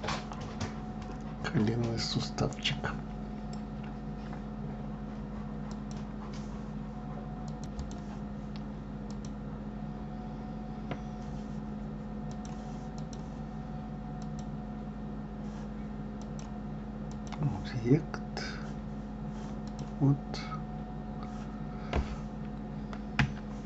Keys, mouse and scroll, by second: 0.9-4.0 middle drag, 8.3 middle click, 9.5 click, 12.7 click, 14.6 click, 16.6-19.6 drag, 20.1 click.